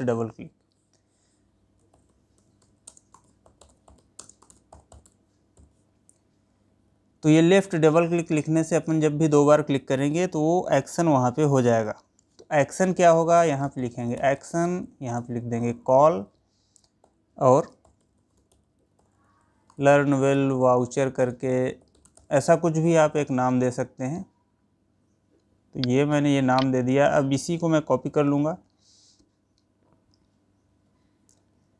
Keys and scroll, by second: 3.3 space, 4.7 space, 27.1 ctrl+c.